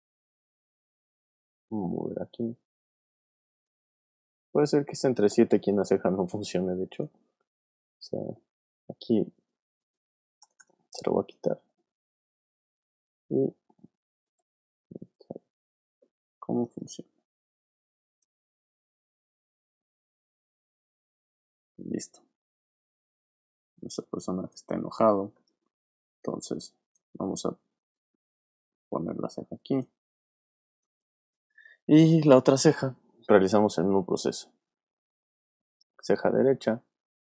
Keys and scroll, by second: 3.9 super+z, 10.4 BackSpace, 25.8 v, 27.1 super+z, 30.8 space.